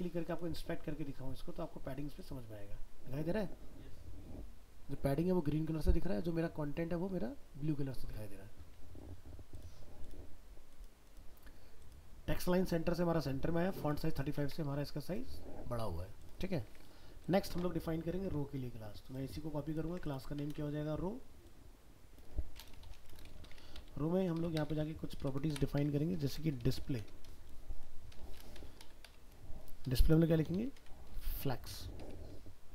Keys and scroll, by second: 14.4 alt+Tab, 19.9 ctrl+c, 20.5 ctrl+v.